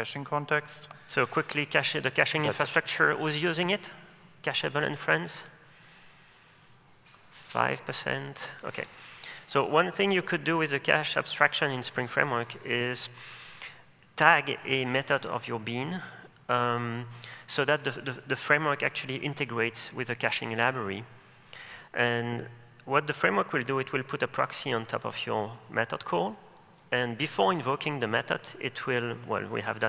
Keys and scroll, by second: 21.4 super+e, 24.9 super+e.